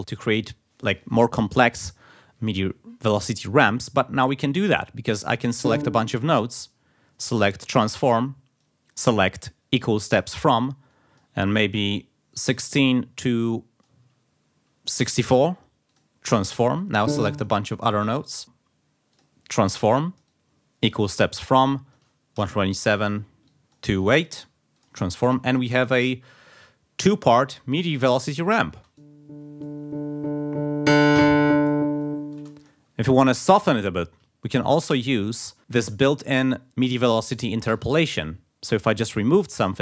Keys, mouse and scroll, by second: 0.0 scroll up 1, 5.4 click, 6.6 right click, 7.6 click, 8.6-10.4 drag, 10.9 click, 12.1-13.0 typing, 13.4 click, 15.1 4, 15.9 click, 16.7 click, 18.1 right click, 19.1 click, 19.9-21.3 drag, 21.7 click, 22.3 1, 22.7 7, 23.4 click, 24.2 8, 24.7 click, 25.3 click, 28.2 click, 28.8 space, 32.4 space, 32.6 click, 34.4 shift+right click, 37.7 d.